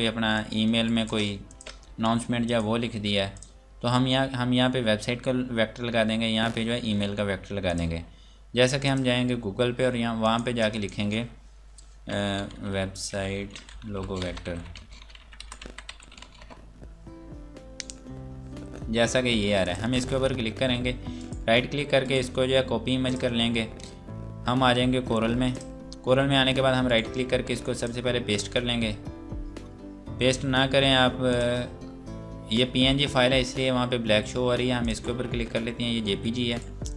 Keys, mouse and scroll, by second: 0.3 click, 0.8 right click, 1.5 click, 1.9 e, 2.4 click, 3.3 click, 5.7 scroll down 1, 7.6 click, 12.1-16.6 typing, 19.6 click, 21.2 right click, 23.1 click, 25.6 click, 26.9 right click, 27.7 click, 28.6-28.9 scroll down 1, 30.4 Delete, 31.3 click, 34.0 scroll down 1, 34.8 click, 36.5 right click.